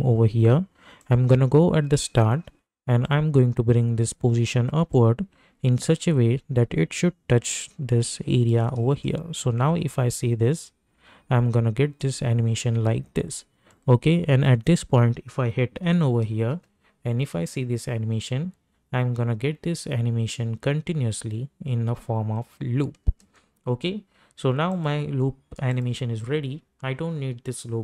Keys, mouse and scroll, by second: 1.3-9.0 drag, 9.0 space, 12.3 space, 13.7-15.8 drag, 15.8 n, 16.5 space, 23.2 space, 24.7 click.